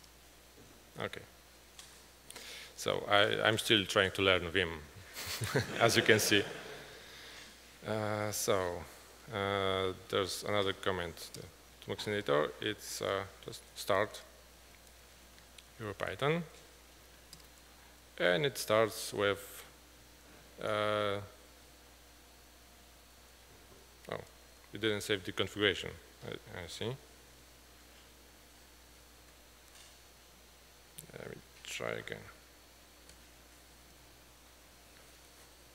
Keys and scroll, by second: 11.8 Return, 11.8 typing, 12.6 Up, 13.0-17.0 typing, 17.4 Return, 23.6 Up, 28.2 ctrl+d, 28.5 ctrl+d, 28.9 ctrl+d, 29.3 q, 30.2 ctrl+d, 30.9 ctrl+d, 32.0 ctrl+d, 32.0 typing, 32.3 ctrl+d, 34.0 F12.